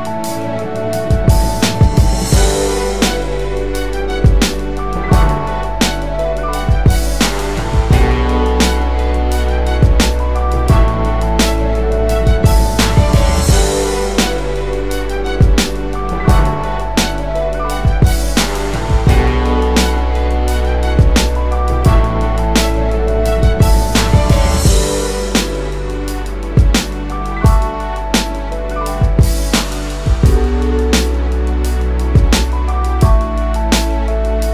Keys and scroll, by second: 5.0 space, 16.8-18.6 space, 17.4 ctrl+space, 22.6-23.6 typing, 26.9 ctrl+z, 31.2-32.8 typing.